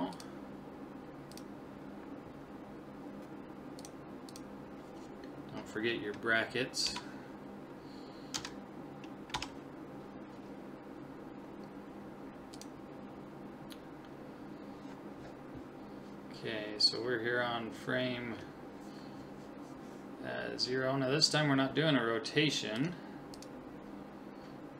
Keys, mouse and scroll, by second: 1.3 click, 3.8-5.5 drag, 22.8 click.